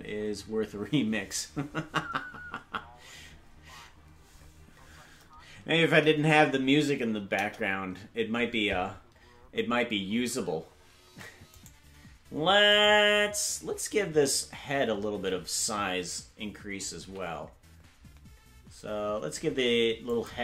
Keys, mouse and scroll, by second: 7.3 KP_0, 11.1 ctrl+Tab.